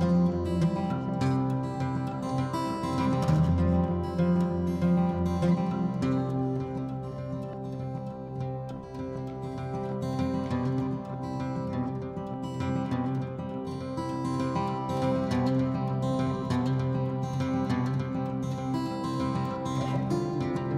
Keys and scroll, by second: 0.0 m, 6.4-8.8 typing, 10.2 ctrl+h, 10.4-11.3 typing, 15.6 m, 18.9 Delete, 20.3 ctrl+h.